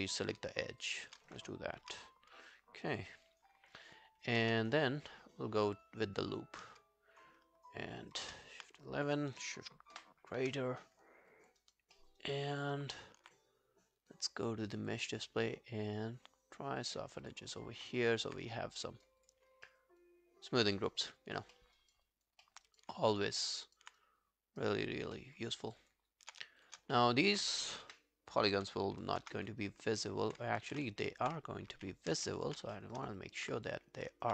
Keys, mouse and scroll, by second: 0.8 shift+click, 4.8 ctrl+right click, 8.3 ctrl+F11, 10.0 shift+., 11.0-11.4 scroll down 1, 11.4 alt+click, 11.6 alt+right click, 11.9 alt+scroll down 1, 12.2 alt+middle click, 12.2 alt+right click, 17.3 double click, 17.6 scroll down 1, 17.9 alt+right click, 18.1 alt+click, 18.5 right click, 19.5 alt+scroll down 1, 19.7 alt+middle click, 20.0 alt+click, 20.8 alt+right click, 21.0 alt+click, 21.6 alt+middle click, 21.8 alt+right click, 22.1 alt+click, 22.5 alt+middle click, 22.7 alt+right click, 23.4 alt+middle click, 23.6 alt+right click, 24.0 right click, 25.2 alt+middle click, 25.7 alt+click, 26.6 alt+click, 26.6 shift+click, 27.0 alt+middle click, 28.2 Delete, 28.2 scroll down 1, 29.4 ctrl+scroll down 1, 29.4 1, 29.6 alt+click, 30.6 ctrl+z, 31.0 alt+middle click, 31.7 alt+middle click, 32.1 ctrl+z, 32.8 alt+middle click, 33.0 alt+right click, 33.2 alt+click, 33.9 scroll down 2, 34.1 alt+click.